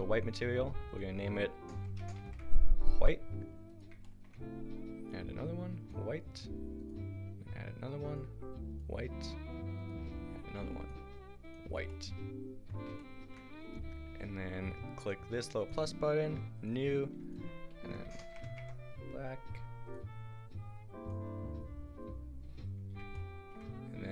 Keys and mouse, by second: 5.0-6.8 drag, 5.0-6.8 right drag, 12.7 a, 19.9 click.